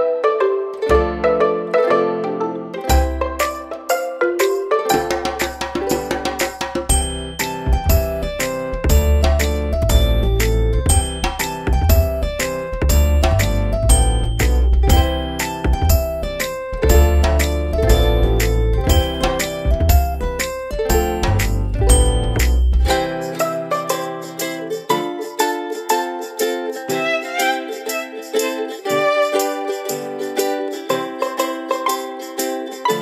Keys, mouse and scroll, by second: 24.0 Down, 24.5 click, 31.7 alt+click.